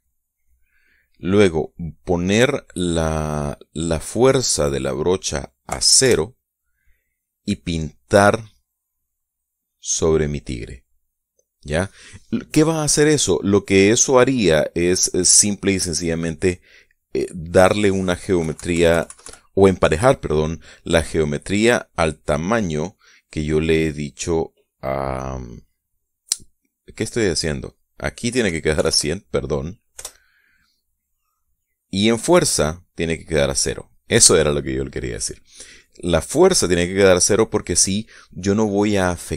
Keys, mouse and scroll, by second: 5.3 click, 6.2 0, 6.6 Return, 7.5 click, 7.8 scroll down 1, 13.5 scroll up 1, 13.7 scroll down 1, 13.8 scroll up 1, 19.0 KP_Subtract, 28.2 click, 28.9 1, 29.4 0, 30.6 Return, 31.5-33.2 drag, 33.8 click.